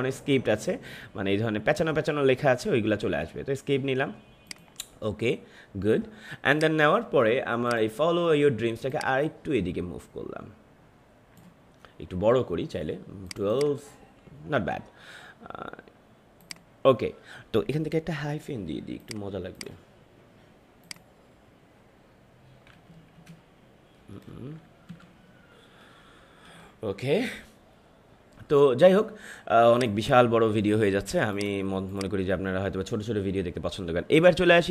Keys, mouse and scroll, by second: 4.4-13.2 drag, 16.4 click, 18.3 t, 18.9 click, 22.9 space, 23.9 BackSpace, 24.8 Right, 26.2 shift+1, 29.7 click.